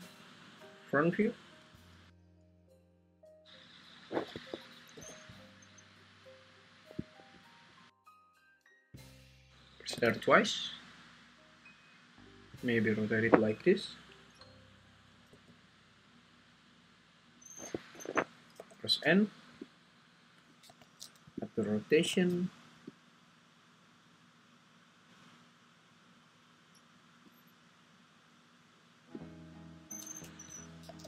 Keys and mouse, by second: 2.6 r, 2.9 r, 4.4 Escape, 4.9 r, 7.0 click, 9.9 ctrl+r, 10.1 ctrl+r, 15.3 r, 17.7 Escape, 18.6 n, 19.6 click, 21.4 click, 23.0-27.4 ctrl+drag, 29.1-30.4 drag.